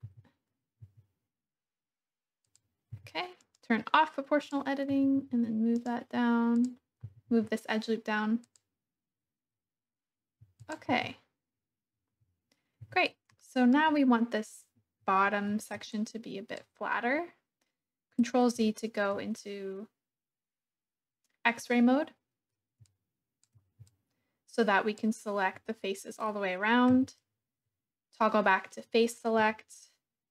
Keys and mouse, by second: 0.0 g, 0.8 z, 2.4 click, 2.9 g, 3.4 click, 4.4 click, 4.9 g, 5.2 z, 5.7 click, 6.5 click, 7.0 g, 7.3 z, 8.4 click, 10.6 click, 10.9 Tab, 12.8 Tab, 13.4 shift+click, 15.2 alt+z, 16.0 click, 18.7 shift+click, 22.8 shift+click, 23.9-25.0 shift+drag, 26.9 3, 29.7-30.3 shift+drag.